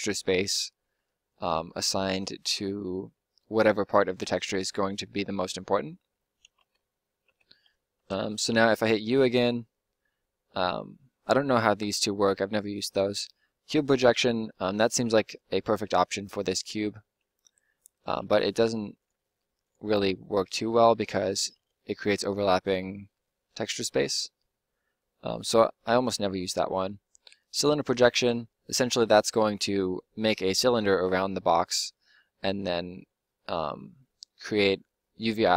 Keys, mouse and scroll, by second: 5.3 middle click, 6.5 Tab, 7.2 Tab, 8.4 u, 16.8 middle click, 17.3 g, 18.2 s, 19.2 g, 20.2 g, 21.5 s, 22.2 g, 26.3 u.